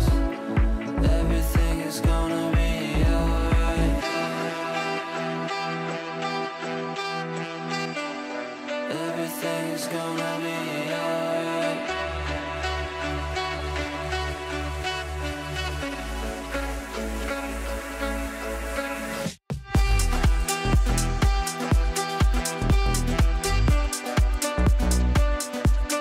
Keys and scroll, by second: 3.7 ctrl+r, 9.5 ctrl+z.